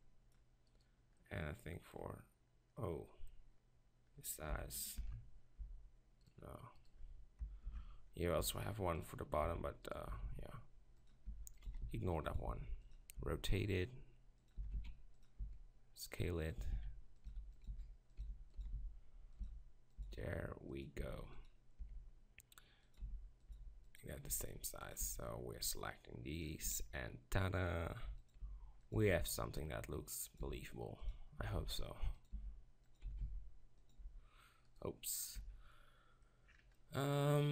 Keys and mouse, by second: 0.7 b, 5.0 ctrl+l, 5.6 g, 7.6 ctrl+l, 8.4 g, 9.4 s, 10.2 s, 11.3 g, 11.7 s, 12.5 s, 13.2 r, 14.6 s, 15.4 s, 16.6-21.8 typing, 23.0 s, 23.5 g, 24.3 s, 26.7 b, 26.7 g, 28.4 s, 29.0 g, 30.4 s, 31.5 s, 32.3 g, 33.1 s, 34.0 g, 35.4 Tab.